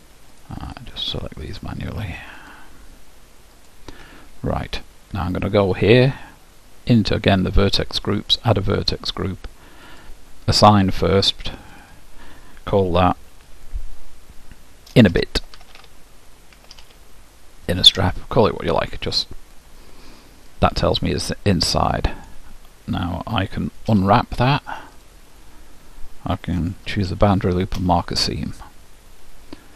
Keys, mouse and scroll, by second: 0.5-5.5 drag, 8.4-13.8 drag, 14.0 click, 15.7 n, 19.9 middle click, 20.6 scroll down 1, 20.8-22.3 middle drag, 24.0 u, 27.2 shift+'.